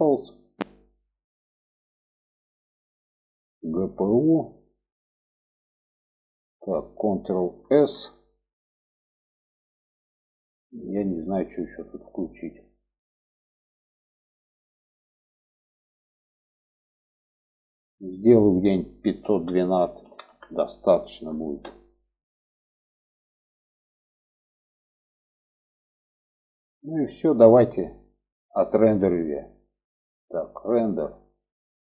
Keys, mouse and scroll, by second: 2.7 click, 4.1-5.3 drag, 8.3 ctrl+s, 15.0 click, 18.4-22.3 drag, 30.8-31.9 drag.